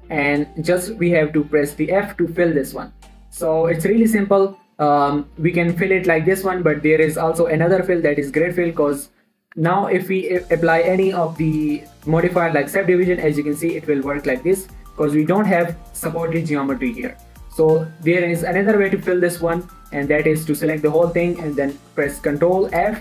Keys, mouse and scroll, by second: 2.6 f, 3.2 scroll down 1, 3.4-7.1 middle drag, 9.3 scroll up 2, 9.3 middle click, 9.9 Tab, 11.3 click, 13.4 middle click, 13.7-14.8 scroll up 2, 14.8-15.4 scroll up 1, 15.4 click, 15.7 Tab, 15.9 middle click, 17.5 x, 17.9 x, 18.3 middle click, 19.3 alt+shift+click, 19.8 scroll down 1, 20.0 middle click.